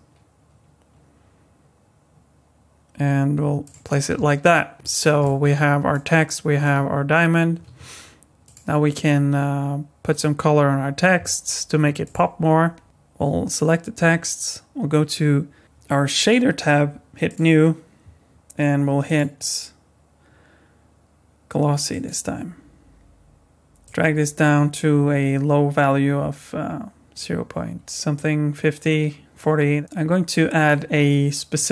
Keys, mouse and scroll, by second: 4.7 middle click, 4.8 middle click, 5.2 middle click, 6.2 middle click, 7.6 z, 12.0 click, 12.8 click, 16.2 click, 17.3 click, 19.0 click, 23.8 click, 29.7 click, 31.6 click.